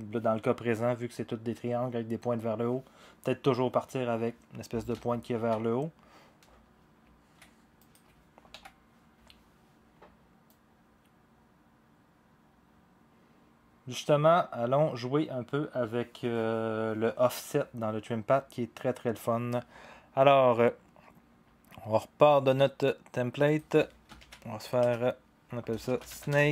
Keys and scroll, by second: 5.4 ctrl+z, 8.5 Delete, 24.2 ctrl+d, 24.8 Return, 25.6-26.5 typing.